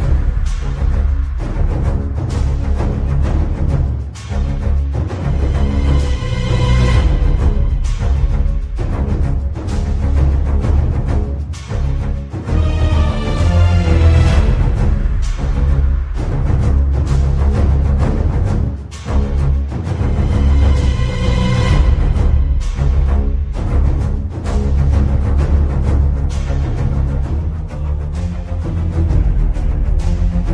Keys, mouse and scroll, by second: 1.4 click, 2.9 shift+middle click, 4.3 click, 5.3 click, 6.5-6.8 scroll down 3, 6.8 click, 7.1 ctrl+t, 7.4 scroll down 4, 7.6 scroll up 5, 7.7 middle click, 8.4 middle click, 9.2 shift+middle click, 11.1 scroll down 1, 11.2 click, 11.4 click, 12.8 scroll up 5, 13.3 click, 13.6 click, 14.6 scroll down 2, 14.7 scroll up 2, 14.9 scroll down 4, 15.1 scroll up 1, 15.1 scroll down 2, 15.2 scroll up 1, 15.5 middle click, 15.8 scroll up 2, 15.9 middle click, 16.3 shift+a, 23.1 click, 23.6 click, 24.6 scroll up 2, 25.4-25.8 scroll up 5, 25.9 middle click, 27.0 click, 28.5 scroll down 2, 28.6 middle click, 29.0 shift+middle click, 29.0 scroll up 3, 29.2 middle click, 29.7 scroll down 4, 29.8 middle click, 30.0 scroll up 1, 30.4 middle click.